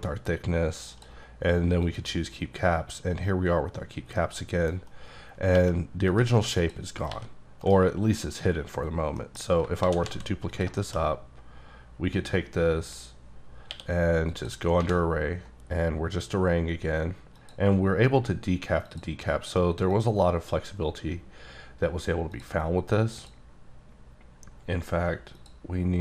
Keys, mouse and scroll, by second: 1.8 click, 4.1 middle click, 5.5 g, 6.1 right click, 6.6 click, 7.1 g, 7.6 right click, 9.2 middle click, 9.4 scroll down 1, 9.8 shift+d, 10.1 z, 10.5 click, 10.8 shift+middle click, 13.7 q, 14.3 click, 14.8 1, 15.7-16.1 scroll up 1, 16.1 click, 17.4 click, 19.9 click, 22.3 click, 23.2 click, 25.4 click.